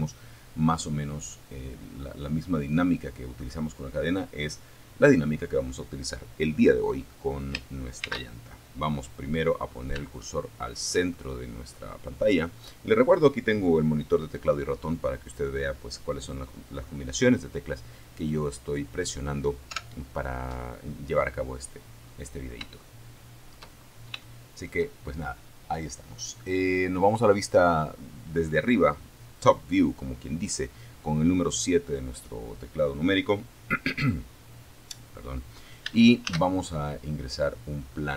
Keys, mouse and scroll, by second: 3.2 click, 6.2 shift+c, 8.3 shift+click, 9.6 click, 17.8 KP_7, 20.2 scroll up 2, 21.0 shift+middle click, 22.0-23.5 shift+scroll up 3, 22.4 shift+middle click, 34.4 shift+a, 36.8 click.